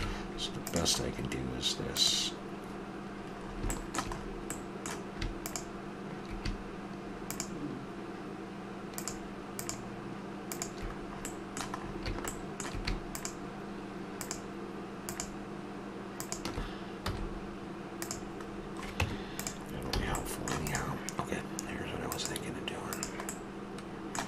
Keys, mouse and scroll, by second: 0.0 ctrl+Tab, 2.0-3.9 drag, 3.6 middle click, 3.9-5.8 middle drag, 11.0 middle click, 17.1 x, 19.0 Tab, 20.0 a, 21.8-23.0 drag, 23.3-24.1 middle drag.